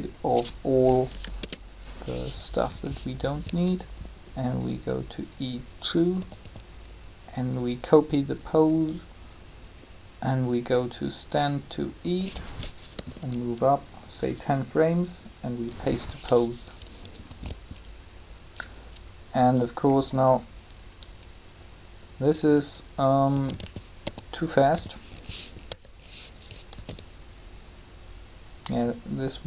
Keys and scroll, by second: 1.0 typing, 1.1 Delete, 1.3 Return, 6.1 typing, 12.8 Up, 17.3 alt+a, 23.1-24.6 typing, 25.6 2, 27.9 alt+a.